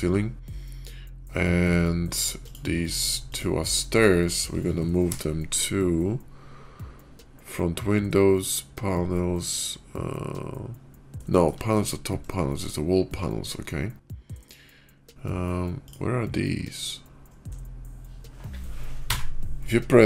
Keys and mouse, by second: 2.3 click, 3.2-3.7 shift+drag, 4.9 m, 11.1 shift+drag, 11.4 middle click, 11.8-16.9 shift+middle drag, 19.0 KP_Decimal.